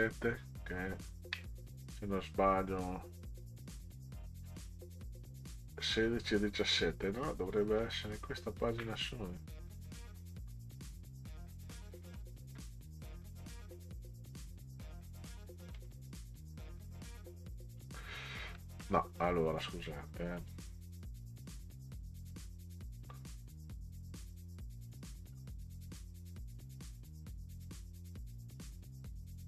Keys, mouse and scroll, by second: 1.8 scroll down 2, 7.8 shift+click, 8.6 shift+click, 9.4-10.8 drag, 11.2 click, 11.9 shift+click, 13.7-15.3 drag, 15.8 click, 16.3-17.8 drag, 18.6 middle click, 20.4 click, 22.4 scroll up 2, 25.3 scroll down 2.